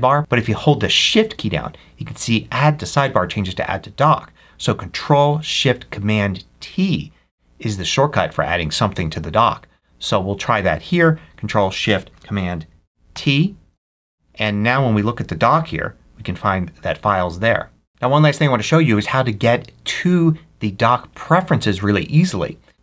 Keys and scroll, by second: 13.0 ctrl+shift+super+t.